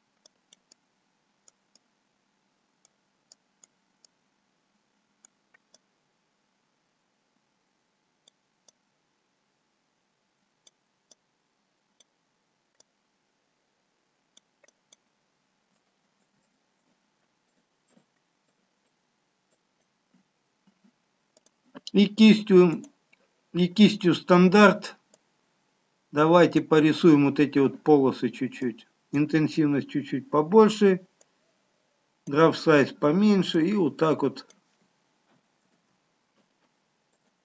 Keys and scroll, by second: 35.9 ctrl+z.